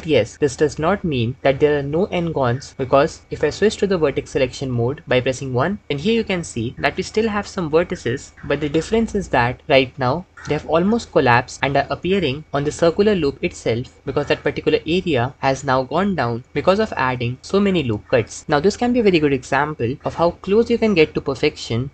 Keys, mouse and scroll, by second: 4.3 1.